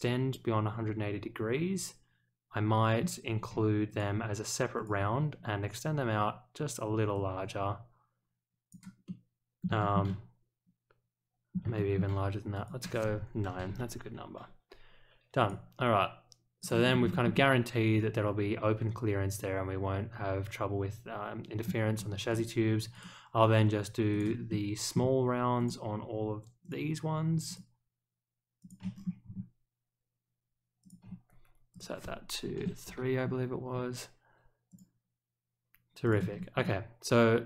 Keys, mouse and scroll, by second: 3.9 ctrl+click, 4.7 ctrl+click, 6.0 scroll down 1, 7.1-8.7 drag, 9.0-9.6 middle drag, 9.8 shift+middle click, 10.0-11.5 middle drag, 11.7 shift+middle click, 12.5 click, 15.3 click, 16.6 click, 16.8 scroll up 1, 17.1 shift+middle click, 17.3-21.6 middle drag, 21.9 scroll up 1, 22.3 click, 22.9 click, 24.1 click, 24.4-24.9 middle drag, 25.5 ctrl+click, 26.6 ctrl+click, 27.4 ctrl+click, 28.6 ctrl+click, 28.9 scroll down 1, 30.8 ctrl+click, 31.7 click, 34.7 click, 36.0 click, 36.3 scroll up 1, 36.6-37.4 middle drag.